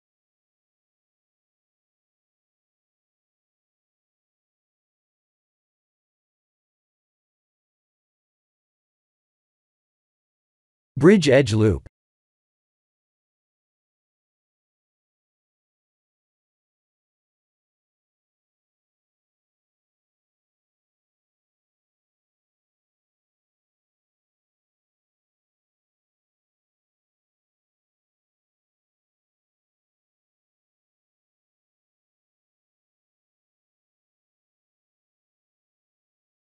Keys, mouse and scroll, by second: 0.7 Tab, 1.4 3, 2.5 click, 2.9 b, 4.4 i, 6.7 x, 8.0 middle click, 8.9 2, 9.3 alt+click, 10.5 alt+shift+click, 11.5 ctrl+e, 14.2 Tab, 14.8-15.4 scroll down 8, 15.4 shift+z, 15.8-17.2 scroll down 6, 16.9 click, 17.3 middle click, 18.9 click, 19.4 middle click, 19.7 middle click, 20.0 middle click, 20.2 middle click, 20.3 middle click, 20.6 middle click, 20.7 middle click, 22.5-22.9 scroll up 3, 23.7 click, 23.7 scroll up 3, 27.1 middle click, 29.9-30.2 scroll up 3, 30.6-32.1 scroll up 4, 33.0 shift+d.